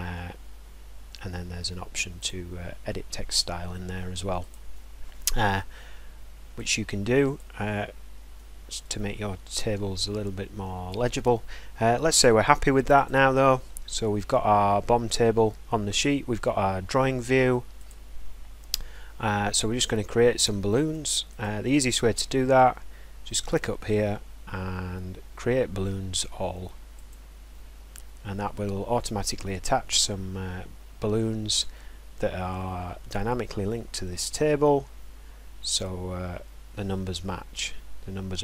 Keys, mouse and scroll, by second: 2.3 click, 4.5 click, 7.4 click, 7.8 middle click, 7.9-8.5 scroll, 8.8 middle click, 10.9 click, 13.0 click, 13.3-13.9 scroll, 17.9 click, 21.4 click, 27.1 click.